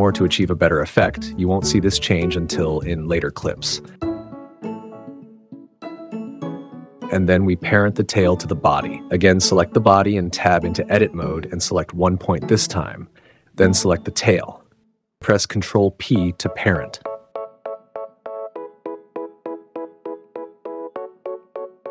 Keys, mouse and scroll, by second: 0.0 s, 0.6 super+z, 0.8 s, 2.9 g, 3.5 click, 4.9 click, 5.2 g, 5.9 click, 6.1 click, 6.3 g, 6.5 click, 14.6 ctrl+p, 21.0 g, 21.5 super+z, 21.7 super+s.